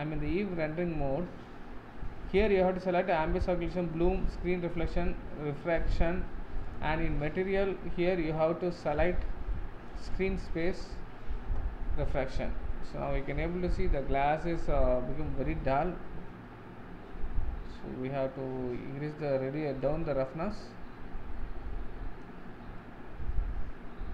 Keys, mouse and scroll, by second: 10.7 click, 12.3-20.3 middle drag, 20.3-22.8 drag, 22.8-24.1 middle drag.